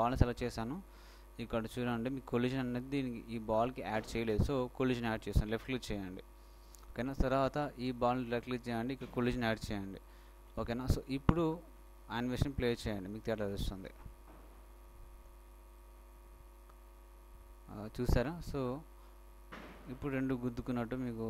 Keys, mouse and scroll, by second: 0.9 click, 3.8-6.1 middle drag, 6.1-7.8 right drag, 8.2-10.1 drag, 9.8-11.6 right drag, 12.0 middle click, 13.9 alt+shift+a, 15.8-18.1 right drag.